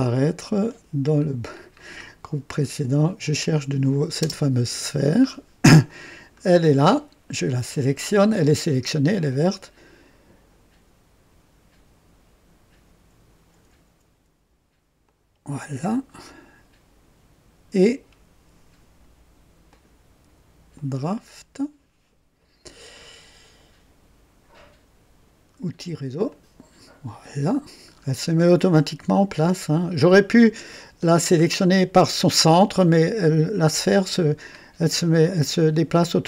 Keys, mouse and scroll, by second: 0.6 click, 1.2-2.0 scroll down 4, 3.2 click, 3.8 click, 4.2 space, 5.2 scroll down 2, 5.8-7.1 drag, 15.0 ctrl+click, 20.9 click, 26.2 click, 27.8-28.2 scroll up 2, 28.5-30.9 drag, 31.0 scroll down 1, 32.7-33.7 drag, 34.5 scroll down 1, 35.2-36.2 drag.